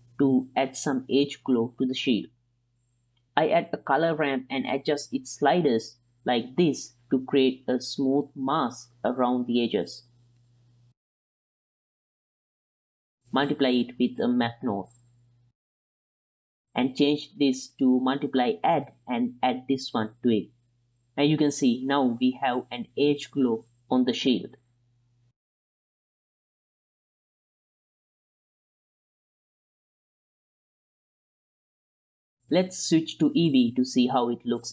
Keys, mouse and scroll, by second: 0.1 click, 1.2 ctrl+shift+click, 1.9-2.8 drag, 3.4 q, 3.5 click, 4.5 ctrl+shift+drag, 4.7 click, 5.0 click, 5.5-6.7 drag, 7.0 drag, 7.7 drag, 8.0 drag, 9.6 click, 11.0 click, 11.8 click, 12.1-12.5 drag, 12.6 click, 12.6 middle drag, 12.6 right click, 13.1 click, 13.3 x, 13.3-14.3 drag, 14.6 click, 15.2 click, 15.4 click, 15.7 click, 16.1 click, 17.3-18.7 drag, 19.2 drag, 19.8 click, 20.2 middle click, 20.9 ctrl+shift+click, 22.2-25.3 middle drag, 25.3-26.0 right drag, 26.3-27.2 right drag, 27.3-27.8 middle drag, 28.4-32.2 right drag, 34.6-34.7 right drag.